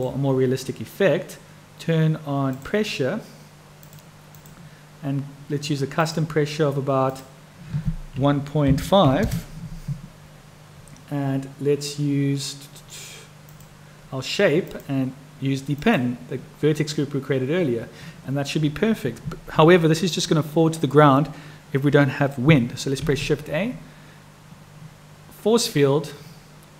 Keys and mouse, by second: 4.1-5.1 drag, 6.2 click, 7.1-10.3 drag, 14.7-16.2 drag, 23.0 shift+a.